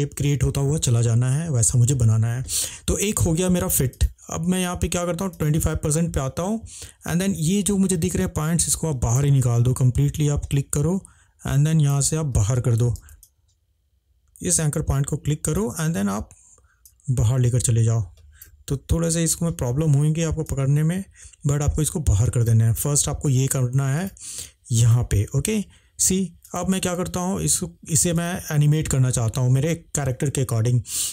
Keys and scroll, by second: 13.0 ctrl+z.